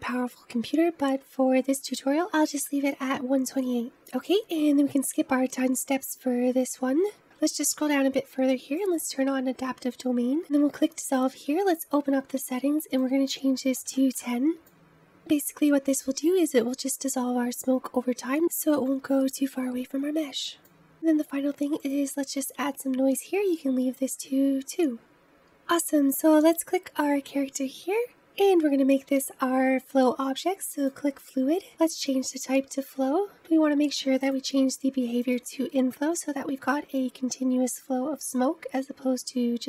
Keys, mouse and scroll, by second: 4.0-6.2 scroll down 1, 6.2-7.2 scroll down 4, 7.2-8.8 scroll down 11, 8.8 click, 11.0-14.7 drag, 21.2-21.9 scroll down 3, 21.9-22.9 drag, 22.9-23.7 scroll down 3, 23.7-24.0 scroll down 1, 25.5-26.4 scroll up 2, 26.4-28.2 drag, 30.7-33.3 drag, 34.2-37.2 drag.